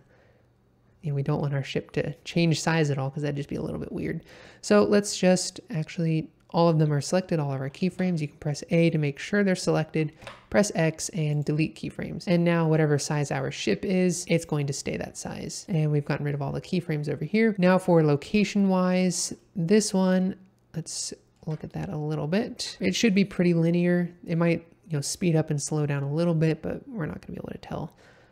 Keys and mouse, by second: 7.9 a, 10.2 x, 13.1-14.8 middle drag, 18.3 click, 19.6-21.3 ctrl+middle drag, 22.4 ctrl+middle click.